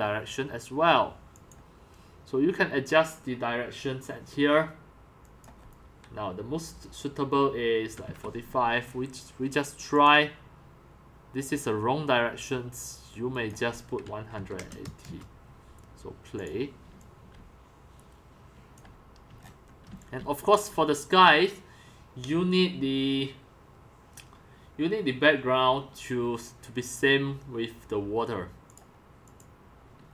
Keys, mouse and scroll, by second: 7.7-8.5 typing, 9.1 Return, 10.0-14.1 drag, 13.8-15.1 typing, 16.5 click, 17.0-20.0 typing, 18.8 click, 19.6-20.0 shift+middle drag, 20.7-25.8 drag, 28.9 click.